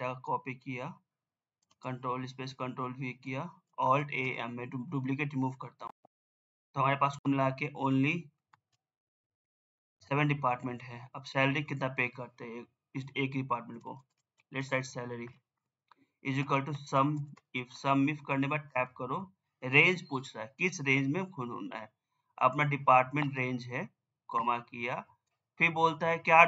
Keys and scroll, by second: 7.9 Caps_Lock.